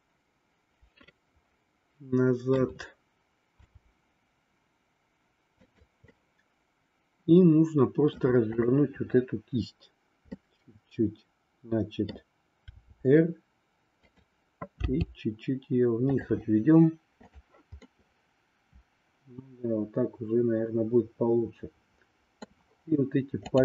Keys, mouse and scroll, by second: 3.6 r, 6.1-8.3 middle drag, 8.5-9.9 drag, 10.4-12.0 middle drag, 12.8 r, 14.9 g, 17.8 scroll up 2, 18.0-22.5 middle drag, 23.4 click.